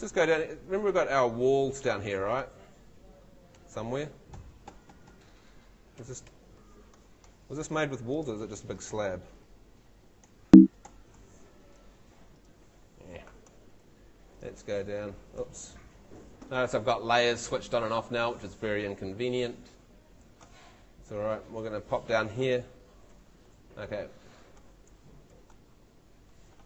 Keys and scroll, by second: 3.7 shift+Tab, 5.9 shift+F2, 6.3 shift+F3, 9.2 shift+F1, 9.5 shift+Escape, 15.7 shift+w, 17.3 shift+a, 20.8 shift+w, 21.4 shift+a, 22.6-23.6 typing, 25.3 shift+Home.